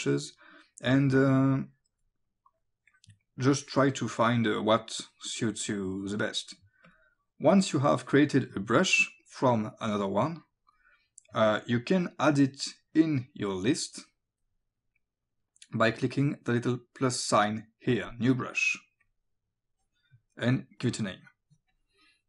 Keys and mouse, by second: 1.3 click, 3.6 click, 6.9 click, 8.1 click, 11.3 click, 12.6 click, 19.1 click, 21.7 click.